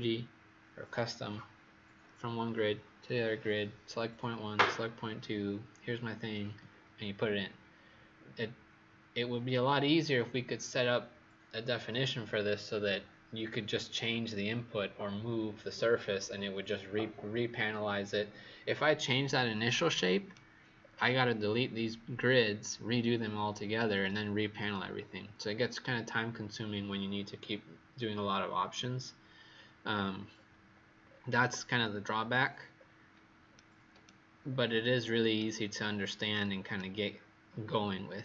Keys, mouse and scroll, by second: 19.7 right click, 20.7-23.2 scroll down 7, 30.1-31.0 scroll down 3, 31.0-32.7 scroll up 1, 32.7-33.5 scroll down 2, 33.5 right click, 34.4-35.3 scroll up 2, 35.3 right click, 37.4-38.2 scroll up 3.